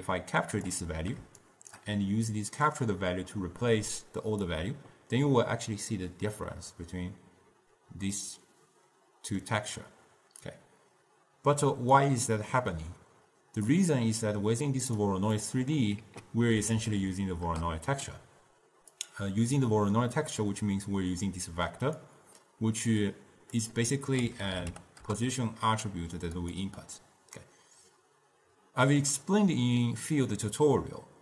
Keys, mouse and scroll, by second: 1.5 shift+right click, 2.8 drag, 8.3-10.6 middle drag, 10.6 drag, 13.9-15.5 drag, 15.5-16.1 middle drag, 16.1 ctrl+a, 22.1-25.2 drag.